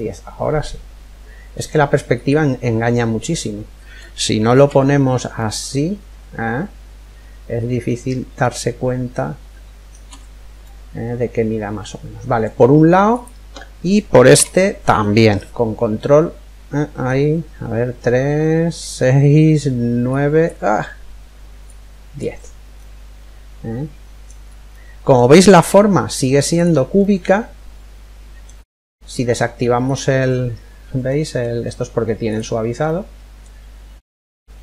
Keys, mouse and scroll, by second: 4.9-6.8 middle drag, 10.2-11.9 middle drag, 12.7-14.6 right drag, 14.0 e, 21.2 click, 22.4-26.3 middle drag, 24.1 scroll up 1, 25.2 Tab, 26.3 Tab, 26.6-28.5 middle drag, 29.5 click, 30.7-32.4 middle drag, 31.8 click, 32.5-34.3 middle drag.